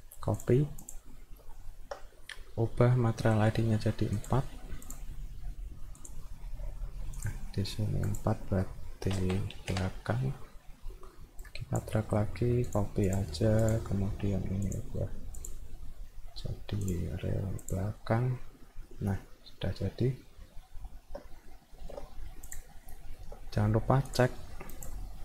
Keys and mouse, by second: 0.4 click, 0.8 click, 1.5 alt+middle click, 4.2 click, 4.9 click, 6.0 click, 7.2 click, 8.1 click, 11.4 click, 12.7 click, 13.1 click, 13.6 click, 14.7 click, 15.3 click, 16.9 click, 17.6 click, 18.9-21.1 alt+middle drag, 21.3 middle click, 21.7 alt+middle click, 22.5 click, 22.9 alt+middle click, 24.7 click.